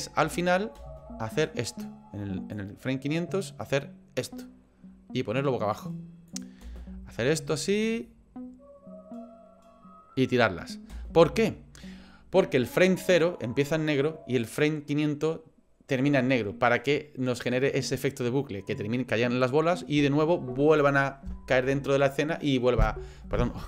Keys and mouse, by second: 0.2 space, 0.8 space, 1.4-2.5 drag, 3.6-5.7 drag, 6.3 click, 6.6 space, 10.9 space.